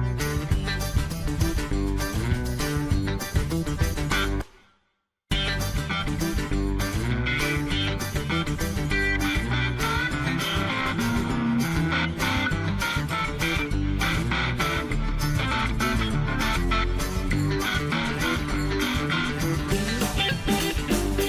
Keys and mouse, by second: 3.6 shift+middle click, 4.5-6.0 drag, 7.2 click, 12.1 shift+middle click, 13.8 click, 14.3 click, 14.6-15.8 drag, 16.2 shift+middle click, 17.5 click, 17.7-19.1 drag, 19.5 shift+middle click, 20.6 click.